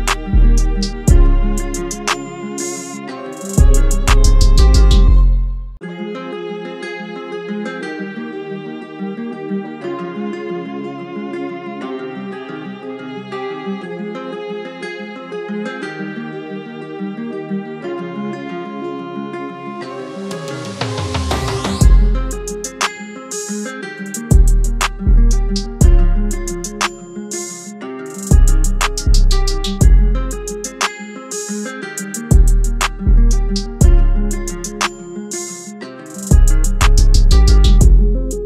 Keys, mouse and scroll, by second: 5.2 e.